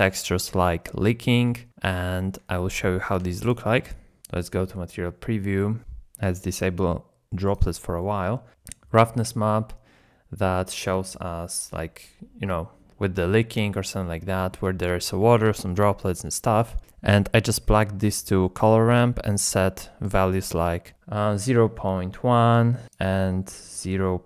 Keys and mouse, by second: 3.4 shift+click, 4.3 z, 7.5 click, 8.8 shift+click, 17.1 middle click, 17.8 middle click, 19.3 click, 22.9 click.